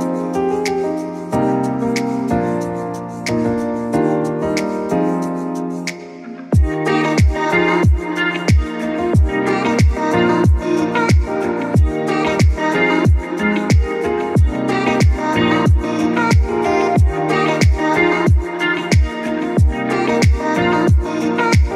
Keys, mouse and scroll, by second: 0.3 click, 3.7 click, 5.5 Return, 6.6-8.7 drag, 8.7 space, 8.8 click, 8.9 space, 9.9 click, 13.4 click, 15.7-21.7 drag.